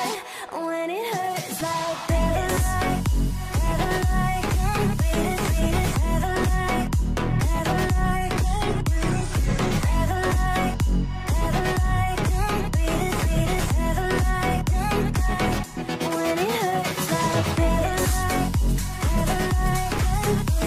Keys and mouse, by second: 0.2 shift+click, 0.6 shift+click, 1.5 g, 7.0-9.4 middle drag, 9.4 3, 9.8 shift+click, 10.5 middle click, 11.2 alt+a, 11.4-15.3 middle drag, 15.5 1, 15.8 click, 16.3 g, 17.3 alt+a, 17.5-19.0 middle drag, 19.0 3, 19.0 shift+click, 19.8 f, 20.0 click, 20.3 shift+click.